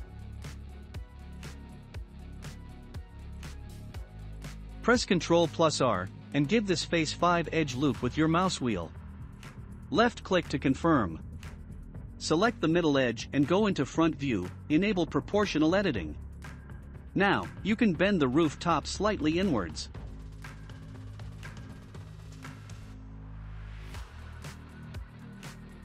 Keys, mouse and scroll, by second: 0.1 2, 0.5-2.8 drag, 2.8 middle click, 3.4-3.9 scroll up 1, 3.9-4.5 scroll up 1, 4.5 ctrl+r, 9.0 2, 10.1-11.7 drag, 11.7-15.2 shift+middle drag, 15.1-19.9 drag, 24.1-25.8 shift+middle drag.